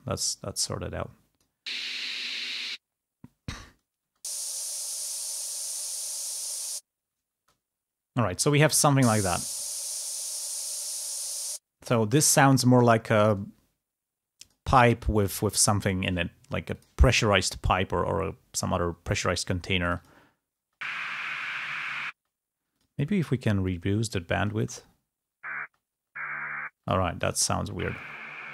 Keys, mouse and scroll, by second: 0.3-1.6 drag, 3.9 space, 7.6 space, 9.2 space, 11.9 space, 19.0 click, 20.5 space, 22.0 space, 23.8 click, 24.6 space, 26.1 space, 26.8 click, 26.8 space.